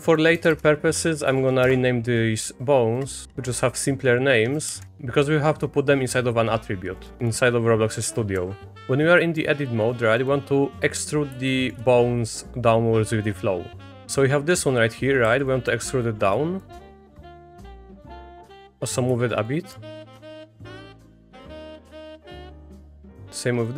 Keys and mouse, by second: 0.5 BackSpace, 3.2-4.9 drag, 4.9 BackSpace, 6.9-8.8 drag, 8.7 Tab, 8.7 1, 9.3 click, 11.6 shift+click, 15.2 e, 16.8 middle click, 17.6 click, 18.1 middle click, 18.5 click, 18.7 middle click, 19.2 shift+middle click, 19.5 middle click, 20.0 middle click, 21.6 click, 22.1 middle click, 22.6 middle click, 22.8 e.